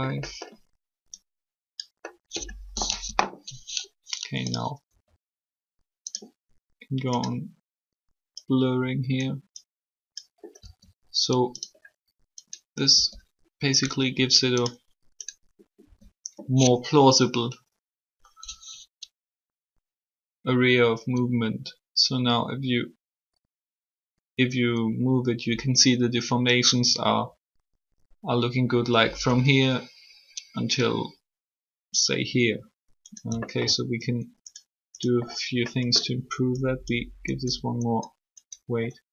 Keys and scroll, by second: 2.8 3, 10.5 r, 12.9 r, 15.8 r.